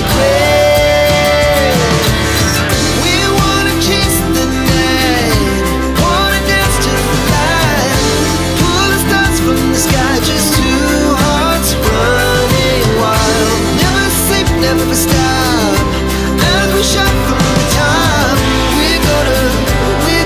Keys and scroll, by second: 2.3 space, 15.1 t, 15.3 space.